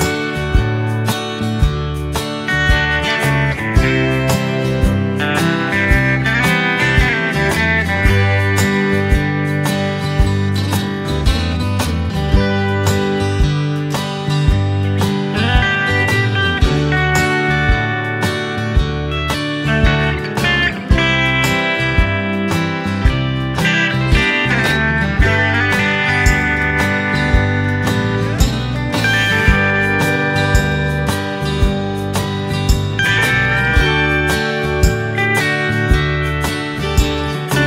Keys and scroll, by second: 2.4 ctrl+c, 2.5 ctrl+v, 7.2 ctrl+c, 7.4 ctrl+v, 10.6 ctrl+c, 11.0 ctrl+shift+v, 12.9 ctrl+z, 13.8 ctrl+v, 17.9 ctrl+z, 21.8 ctrl+c, 22.0 ctrl+v, 26.4 ctrl+c, 26.6 ctrl+v, 32.9 space.